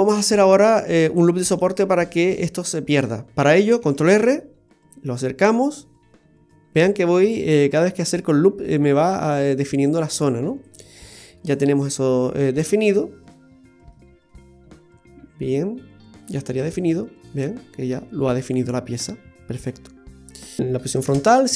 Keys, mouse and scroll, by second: 3.8 ctrl+r, 7.7 ctrl+r, 10.9-11.8 scroll down 2, 11.2 middle click, 14.2 middle click, 15.7 middle click, 16.6 Tab, 16.8-17.3 scroll down 5, 17.3 middle click, 20.2 middle click, 20.6 click, 21.1 shift+a.